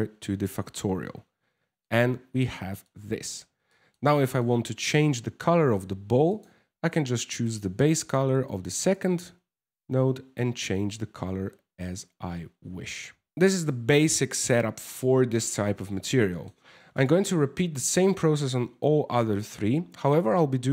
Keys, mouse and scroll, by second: 3.0 middle click, 3.0 scroll down 2, 3.3 scroll down 1, 3.4 middle click, 4.0 middle click, 5.9 click, 7.0 click, 13.3 middle click, 13.3 scroll down 3, 15.0 ctrl+s, 15.7 shift+middle click, 16.6 right click, 17.4 shift+middle click.